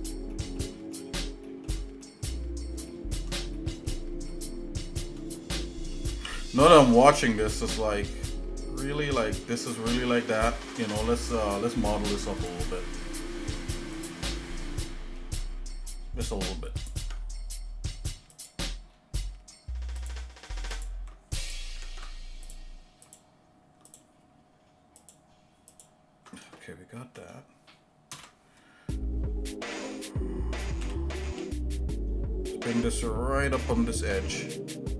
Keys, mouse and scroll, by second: 0.3 middle click, 0.9 shift+middle click, 1.5 shift+middle click, 2.0 shift+middle click, 2.9 shift+middle click, 3.6 middle click, 4.3 shift+middle click, 5.6 shift+middle click, 7.1 shift+middle click, 8.3 scroll up 1, 9.0 shift+middle click, 12.4 click, 14.2 click, 14.9 shift+middle click, 16.3 scroll up 1, 16.8 click, 17.0 Tab, 18.3 click, 18.9 scroll up 1, 20.0 alt+shift+click, 21.4 click, 21.9 ctrl+Tab, 23.0 alt+shift+click, 23.9 alt+shift+click, 25.0 alt+shift+click, 25.8 alt+shift+click, 26.6 shift+middle click, 28.1 ctrl+KP_Add, 30.8 g.